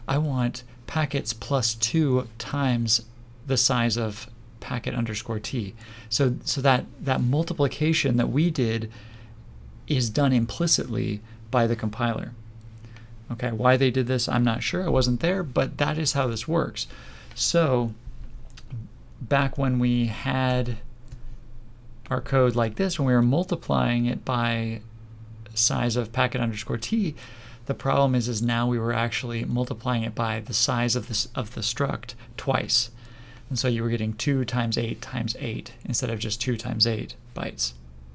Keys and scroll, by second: 19.4 ctrl+z.